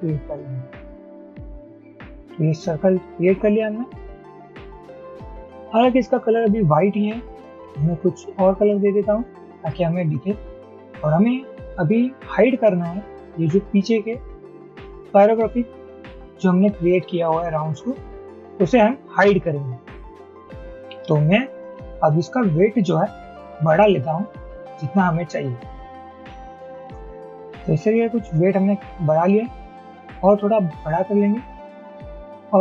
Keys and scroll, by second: 23.9 shift+Up, 30.8 shift+Up, 31.1 shift+Up, 31.3 shift+Up, 31.4 shift+Up.